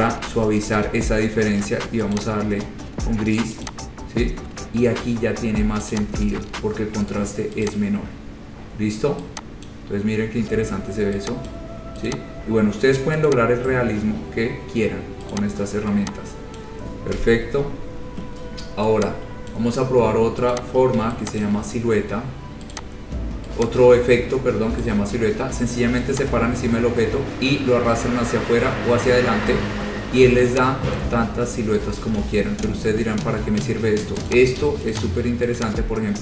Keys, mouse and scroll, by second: 0.5 Page_Down, 2.4 click, 3.9 click, 4.7 scroll down 2, 5.0 scroll up 2, 5.4 scroll, 6.2 click, 7.3 right click, 7.9 click, 8.1-9.0 scroll, 9.9 click, 11.7 click, 12.3 click, 12.5-13.0 scroll, 13.5 click, 14.5-15.1 scroll, 15.5 click, 16.8 click, 17.4 Delete, 19.7 click, 20.7 click, 21.6 ctrl+click, 22.0 scroll, 23.0 click, 24.2 scroll up 3, 25.1 click, 28.2 click, 29.7 click, 31.2 click, 32.2 ctrl+z, 33.0-33.5 scroll, 34.5 click, 35.1 click, 35.8 click.